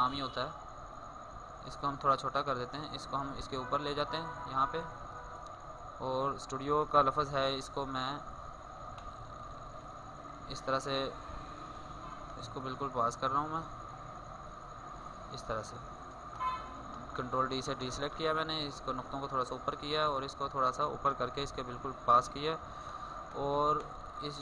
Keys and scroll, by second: 6.3 ctrl+space, 6.8 ctrl+d, 16.1 ctrl+d, 21.0 ctrl+d, 21.3 alt+space.